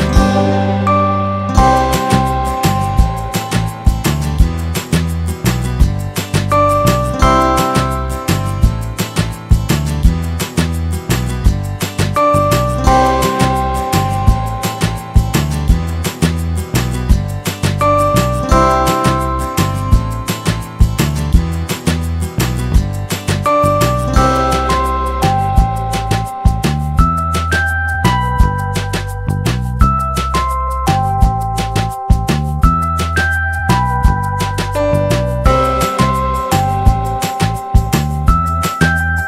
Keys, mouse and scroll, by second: 0.4 click, 1.0 z, 1.6 middle click, 1.7-2.1 scroll down 1, 2.4 scroll down 1, 3.3 alt+middle click, 5.2 click, 6.2 middle click, 6.8 scroll up 1, 7.5-7.9 scroll up 1, 7.9 middle click, 8.1 scroll down 1, 9.4 alt+middle click, 10.1 alt+middle click, 10.4-10.8 scroll up 1, 10.8 F3, 12.0 click, 12.7 click, 13.0 middle click, 13.5 scroll up 1, 14.9 scroll up 1, 15.7 F3, 16.2 middle click, 17.1 click, 18.4 click, 18.8 middle click, 19.4 scroll up 1, 21.1 click, 23.5 click, 23.9 alt+middle click, 26.1 click, 31.1 click, 34.1 F4, 34.4 click, 35.4 alt+middle click, 36.1-36.5 scroll down 1, 37.4 alt+middle click.